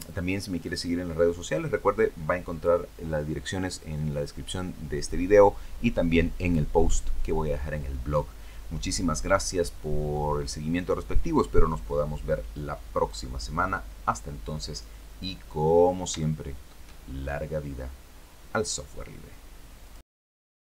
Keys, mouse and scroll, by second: 12.7 click, 14.6-15.6 scroll down 4, 15.9 shift+middle click, 15.9 shift+click, 16.7 shift+scroll up 1, 17.2 scroll down 1, 19.5 click, 20.6 click.